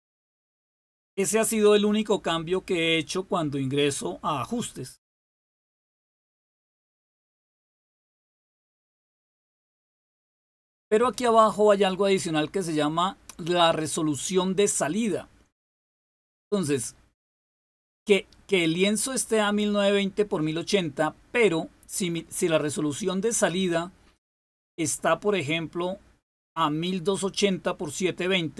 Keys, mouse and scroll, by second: 25.2 click, 27.4 click.